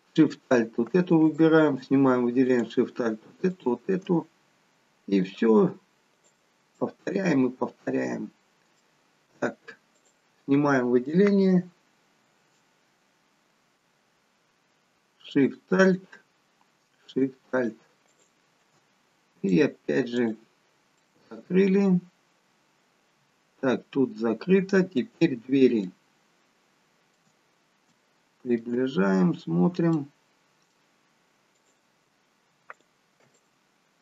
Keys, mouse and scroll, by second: 0.1 alt+shift+click, 1.2 click, 2.5 alt+shift+click, 5.2 click, 6.7 middle click, 9.9 click, 15.3 alt+shift+click, 19.4 alt+shift+click, 20.9 middle click, 25.8 shift+middle click, 27.3-27.9 scroll up 3, 27.9 shift+middle click, 28.9 scroll up 1, 29.9 middle click, 29.9 scroll up 1, 31.5 click, 32.8 alt+shift+click.